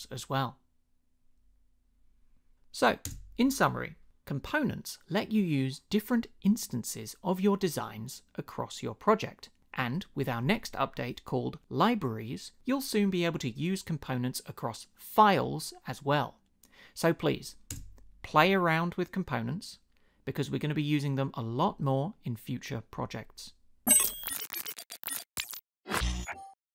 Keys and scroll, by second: 3.0 space, 17.7 space.